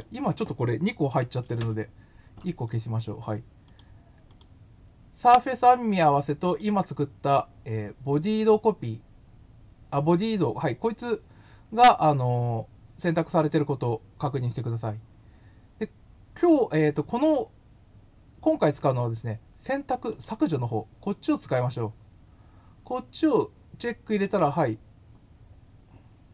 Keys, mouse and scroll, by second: 3.6 click, 4.2 click, 6.4 click, 20.1 click, 24.2 click.